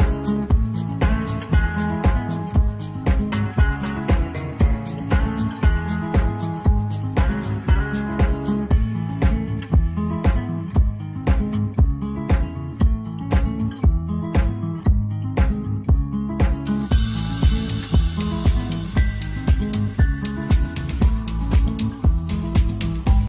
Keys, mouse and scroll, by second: 4.4-6.4 ctrl+z, 7.0 ctrl+z, 7.3 ctrl+z.